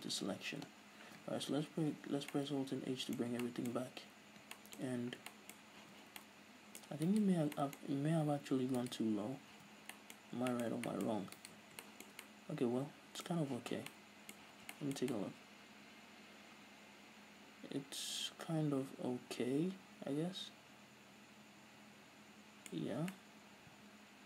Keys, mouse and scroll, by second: 1.1-1.5 scroll down 1, 2.2 alt+h, 2.6-7.3 middle drag, 5.3-5.6 scroll up 2, 6.0 z, 7.3 right click, 7.8-9.1 middle drag, 9.1 right click, 9.8 z, 10.2-11.6 middle drag, 10.5 scroll up 2, 11.6 right click, 12.1-20.5 shift+middle drag, 13.8 z, 14.7 z, 21.7-24.2 middle drag, 23.0 scroll up 2.